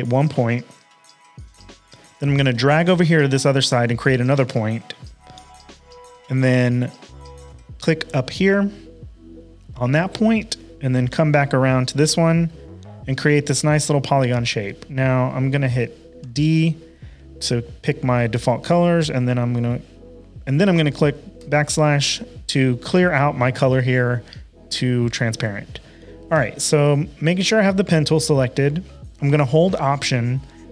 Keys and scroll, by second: 16.2 d, 21.4 /, 26.3 p.